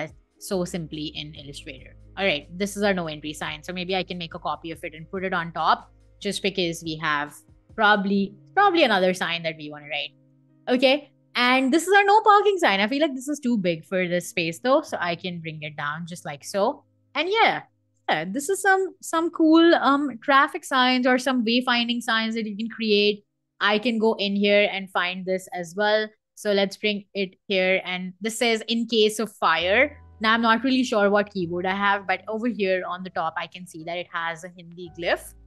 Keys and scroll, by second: 0.4 super+z, 2.9 super+z, 3.6 super+c, 4.8 super+v, 25.3 shift+super+], 29.8 Escape.